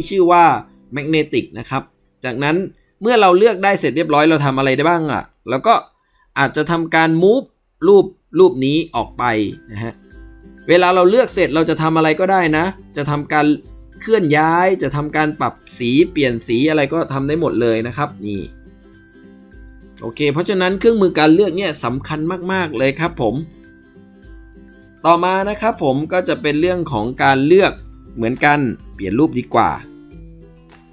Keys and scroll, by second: 16.4 ctrl+u, 23.3 ctrl+d.